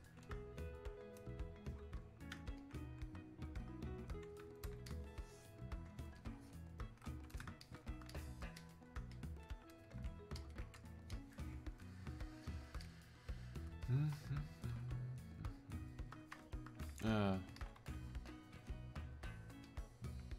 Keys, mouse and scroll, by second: 18.3-20.3 ctrl+drag.